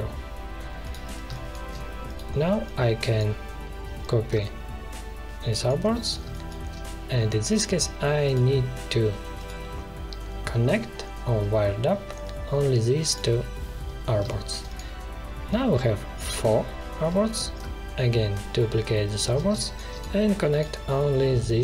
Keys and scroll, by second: 1.2 space, 6.2 space, 14.2 space, 19.5 space.